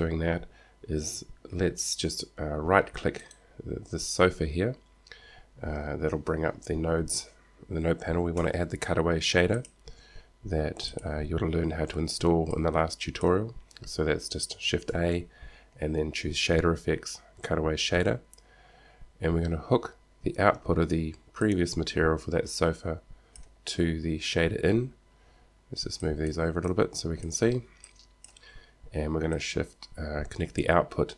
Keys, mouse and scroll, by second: 3.5-5.8 right drag, 8.5 shift+a, 12.8-14.7 drag, 15.0 shift+a, 21.6-23.6 drag, 26.2-29.6 drag.